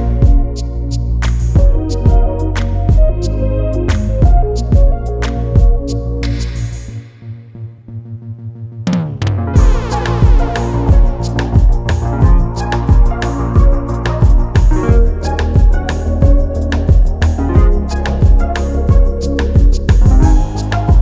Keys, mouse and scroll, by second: 0.3 click, 0.7 scroll down 1, 2.0 click, 3.4 ctrl+g, 3.8-4.2 scroll down 1, 4.3 scroll up 1, 4.5 scroll down 1, 5.2 click, 6.8 scroll up 1, 9.3 click, 11.7 scroll up 1, 14.5 scroll down 1, 15.5 click.